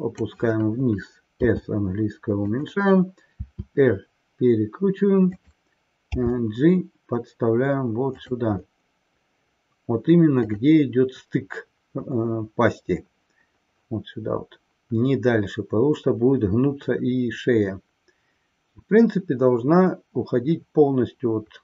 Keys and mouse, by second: 10.3 click.